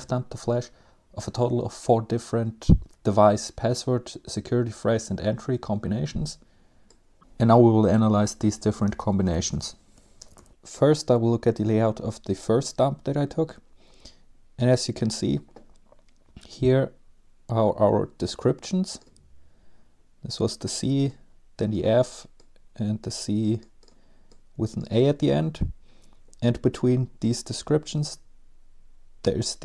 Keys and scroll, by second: 6.9-7.7 typing, 7.8 Escape, 8.3 Down, 8.9-9.6 typing.